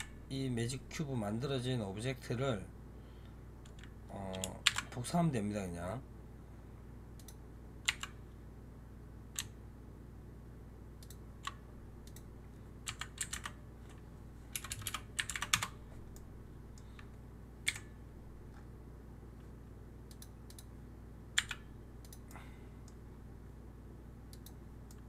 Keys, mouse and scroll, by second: 0.7-3.4 scroll down 2, 3.4-3.8 scroll down 1, 4.5 shift+d, 7.7 r, 11.9-14.6 drag, 14.6 BackSpace, 14.7 BackSpace, 16.0-17.5 middle drag, 17.5 KP_7, 18.4-20.0 scroll up 1, 20.0 click, 20.4 click, 21.2 g, 22.2-23.0 middle drag, 23.0-23.7 scroll down 1, 23.7-24.2 scroll down 1, 24.2 click, 24.8-25.0 middle drag.